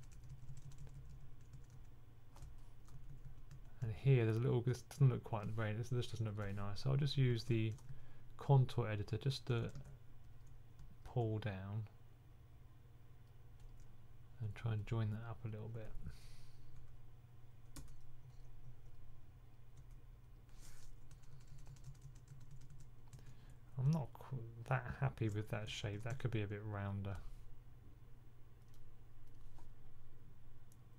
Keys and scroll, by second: 0.0-3.7 typing, 7.0 2, 7.2 2, 7.8 2, 9.6 super+z, 9.6 typing, 13.9 typing, 21.0-23.0 typing, 25.3-26.0 typing.